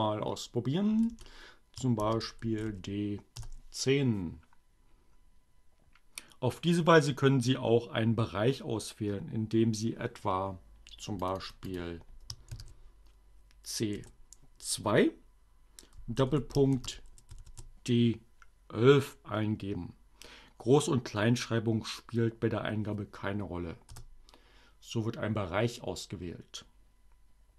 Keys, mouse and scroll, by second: 0.1 BackSpace, 1.7-3.2 typing, 10.6 click, 12.5 shift+c, 13.5 2, 15.6 shift+., 16.5 shift+d, 17.1 shift+1, 23.2 Return.